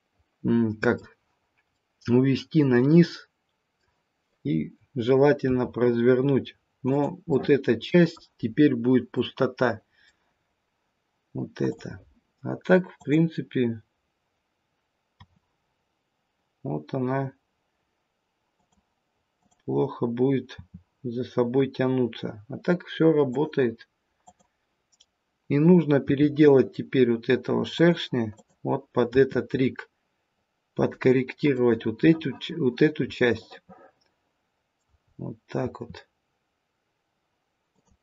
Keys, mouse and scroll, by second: 1.6 middle click, 5.4 r, 7.3 middle click, 8.3-9.2 scroll up 1, 9.2 middle click, 9.2-9.7 scroll up 2, 11.5-13.1 scroll down 1, 13.1 click, 13.7 click, 15.2 r, 19.3 click, 20.5 r, 24.2 click, 25.9 r, 28.3 click, 29.0 r, 33.0 middle click, 35.1-36.0 scroll down 2, 35.5 r.